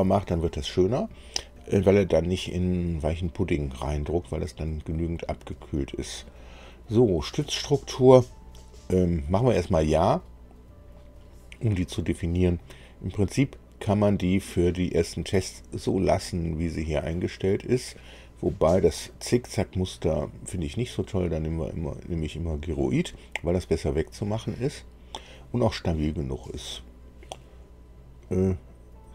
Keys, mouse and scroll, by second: 7.3-8.4 drag, 9.7 click, 14.1-17.8 drag, 19.5 click, 21.7 click, 28.2 click.